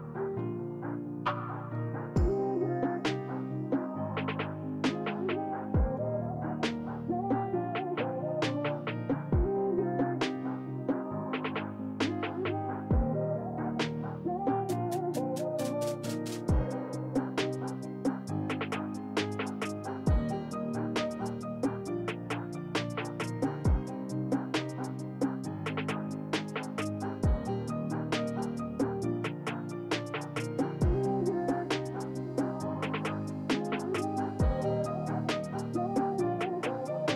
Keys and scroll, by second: 1.2 s, 7.8 ctrl+z, 8.8 ctrl+z, 10.1 ctrl+z, 23.9 s, 35.7 s.